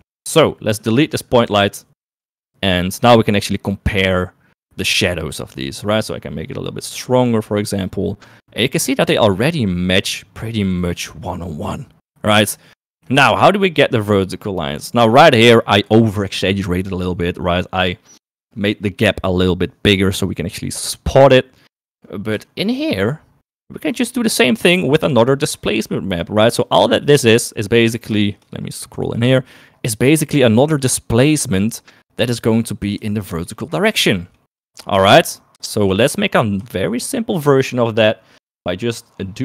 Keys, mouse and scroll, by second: 0.6 shift+middle click, 1.1 click, 1.8 Delete, 2.0 Delete, 3.9 shift+middle click, 6.6 click, 7.6-11.5 drag, 14.0 shift+middle click, 23.8 shift+middle click, 25.0 shift+middle click, 27.3 middle click, 29.5 shift+middle click, 30.7 shift+middle click, 31.5 shift+middle click, 34.5 shift+middle click, 35.1 shift+middle click, 37.4 shift+middle click, 38.9 middle click.